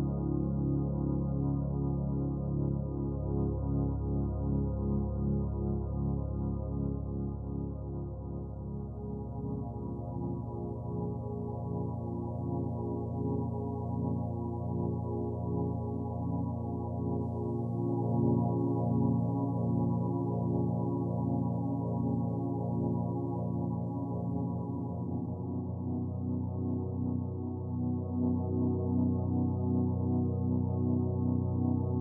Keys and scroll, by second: 23.8 ctrl+l.